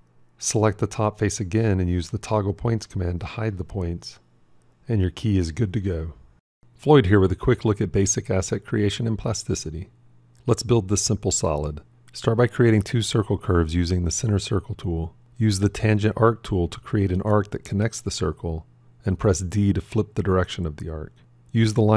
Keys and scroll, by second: 2.2 f, 19.3 d.